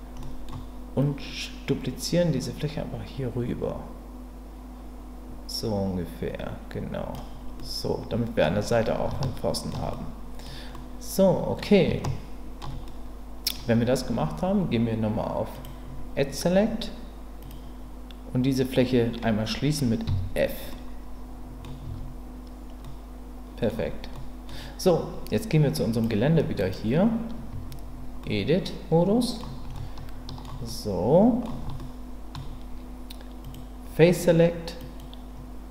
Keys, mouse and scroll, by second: 0.2 middle click, 1.0-7.1 drag, 7.6 middle click, 9.2 shift+middle click, 9.9 middle click, 10.7 middle click, 12.0 shift+middle click, 12.9 middle click, 15.5 click, 17.4 click, 20.1 f, 20.7 middle click, 21.8 Tab, 22.8-23.7 middle drag, 24.1 middle click, 25.9 click, 26.6 click, 27.5 Tab, 28.2-29.4 middle drag, 29.7 shift+middle click, 30.6 middle click, 31.8 shift+middle click, 33.4 click, 34.9 click.